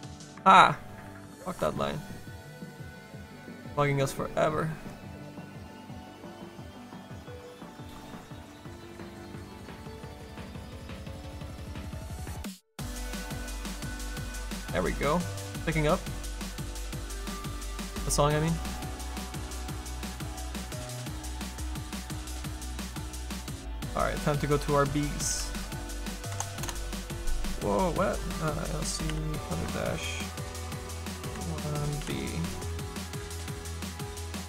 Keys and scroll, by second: 25.3 b.